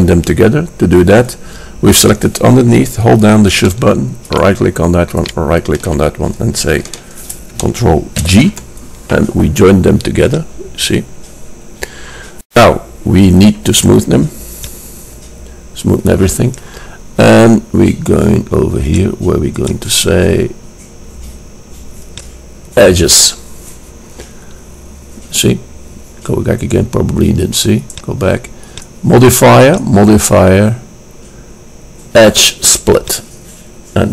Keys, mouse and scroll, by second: 4.4-7.2 drag, 8.4 ctrl+j, 10.5-12.3 drag, 13.7 right click, 14.6-16.6 drag, 19.0-21.7 drag, 28.0-31.7 drag.